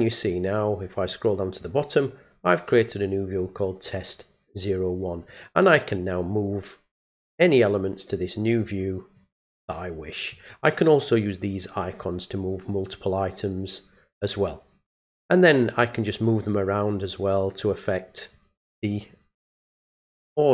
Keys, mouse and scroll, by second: 1.1 click, 2.7 click, 7.4 click, 9.1 click, 15.4 click.